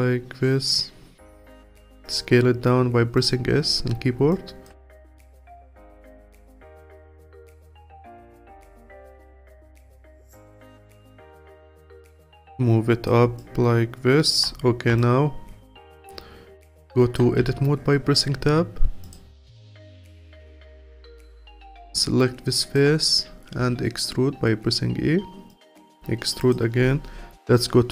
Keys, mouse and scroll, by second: 0.9-1.6 scroll up 7, 1.6 s, 4.0-4.3 scroll up 1, 4.3-4.9 alt+drag, 4.9 s, 7.4-8.3 alt+drag, 8.3 alt+middle click, 9.1 click, 10.2 click, 11.4 click, 12.2 click, 13.4-17.4 alt+drag, 17.4 Tab, 18.3 3, 19.0 click, 19.8-20.2 scroll down 1, 20.2-23.6 alt+drag, 23.6 e, 25.8 e, 27.3 KP_3.